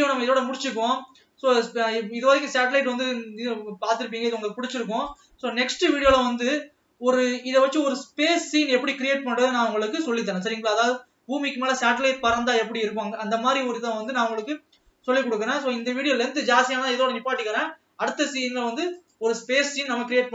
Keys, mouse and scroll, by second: 0.0 ctrl+s, 1.8-2.1 scroll down 1, 2.1-3.2 middle drag, 3.2 scroll up 2, 3.5-4.8 middle drag, 4.8 click, 5.5 drag, 6.3 scroll down 1, 6.5-8.1 middle drag, 8.1-9.6 scroll up 1, 9.6-10.6 middle drag, 10.6 scroll up 2, 14.9 scroll down 1.